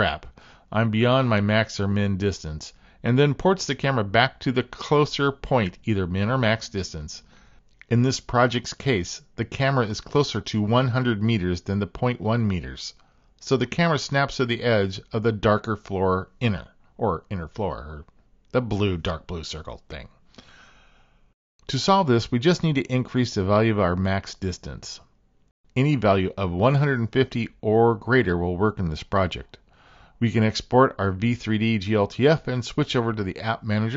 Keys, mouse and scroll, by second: 23.3-25.9 drag, 29.3-33.1 drag.